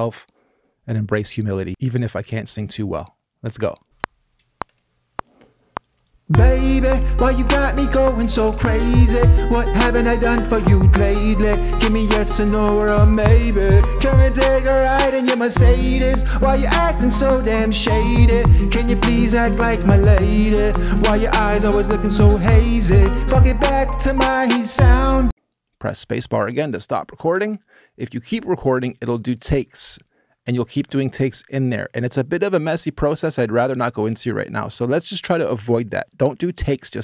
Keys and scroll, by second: 3.6-4.4 typing, 25.0 space.